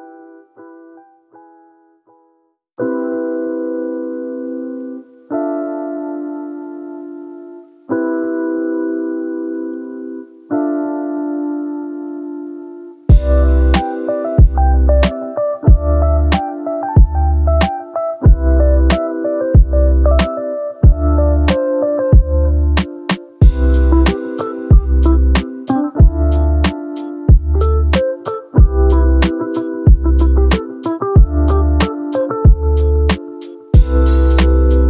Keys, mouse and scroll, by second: 8.2 middle click, 9.8 shift+a, 16.0-16.7 drag, 17.2-17.7 drag, 22.1-22.8 drag, 23.7-25.9 drag, 26.3 click, 26.9 click, 29.4 shift+a, 32.2-32.8 drag, 33.6-34.2 drag.